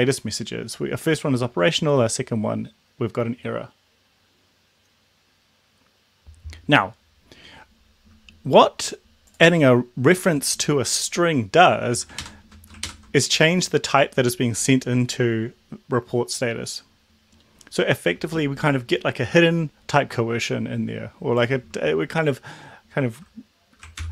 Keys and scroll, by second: 12.0 Left, 12.3 ctrl+shift+Right, 12.9 ctrl+shift+Right.